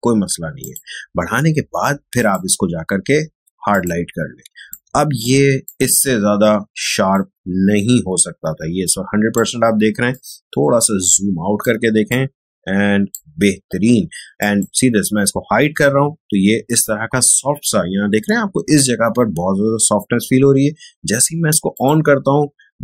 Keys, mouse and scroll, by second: 4.4 space, 4.6 click, 4.9 space, 5.6-7.8 ctrl+drag, 7.8 ctrl+1, 8.8 click, 8.8 click, 9.0 space, 9.2 space, 10.1-14.3 ctrl+drag, 18.3 space, 21.7 click, 22.7 space.